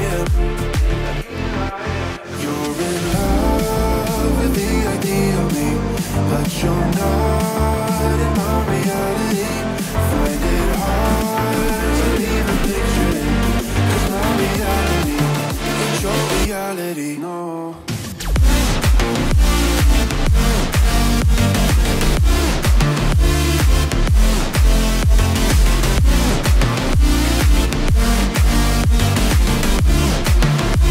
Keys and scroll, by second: 3.2 ctrl+z, 5.9 ctrl+z, 20.0 ctrl+t.